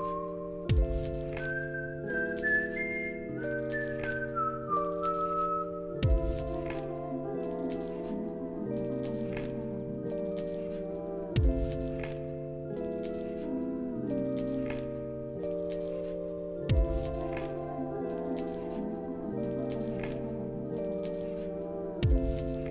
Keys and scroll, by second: 1.5 alt+z, 8.2-9.2 typing, 13.2 ctrl+c, 14.9 ctrl+v, 17.3 ctrl+v, 19.8 ctrl+s.